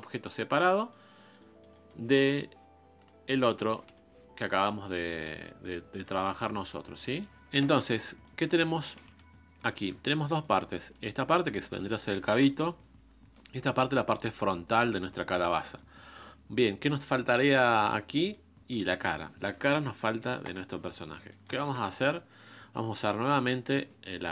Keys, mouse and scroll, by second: 0.3-2.3 middle drag, 2.3 KP_Divide, 2.7-3.2 scroll down 1, 3.2 click, 3.3 middle click, 3.8 KP_Divide, 4.4 middle click, 5.2 scroll up 1, 5.4 middle click, 5.8 scroll down 4, 6.0 scroll up 1, 6.0-9.2 middle drag, 9.2 KP_Divide, 10.1 middle click, 11.0 click, 11.8 shift+middle click, 12.4 KP_1, 13.4 click, 15.7 shift+middle click, 16.4 scroll up 2, 17.0 scroll down 1, 18.0 scroll down 2, 18.1-19.7 middle drag, 19.7 KP_5, 20.4 KP_1, 21.0-21.3 scroll up 1, 21.3-22.5 shift+middle drag, 22.5 ctrl+Tab, 24.0-24.3 scroll up 3.